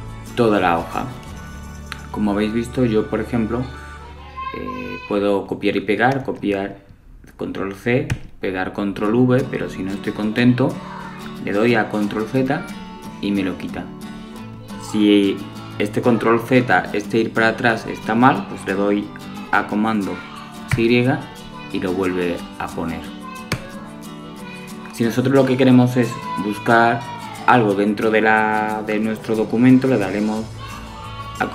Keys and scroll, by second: 11.3 super+z, 20.5 super+y, 30.8 super+f.